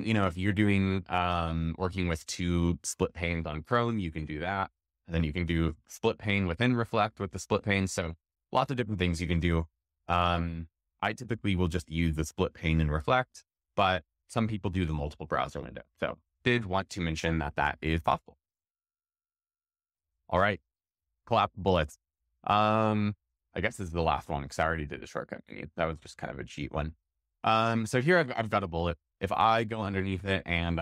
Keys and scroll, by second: 19.3 shift+super+x, 25.1 shift+super+x.